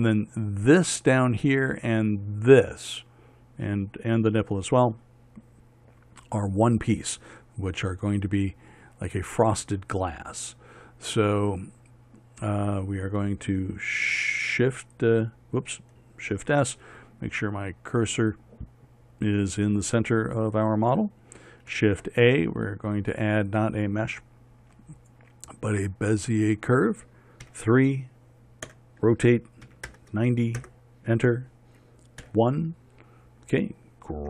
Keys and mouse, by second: 16.8 shift+s, 22.2 shift+a, 27.9 KP_3, 29.1 r, 32.7 KP_1.